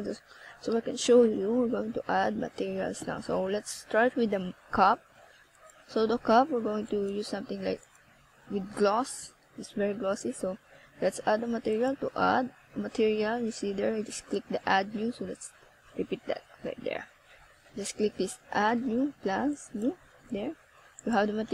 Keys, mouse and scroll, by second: 3.3 r, 4.0 click, 4.1 middle click, 8.7 right click, 11.8 KP_0, 13.3 right click, 14.8 r, 18.2 click.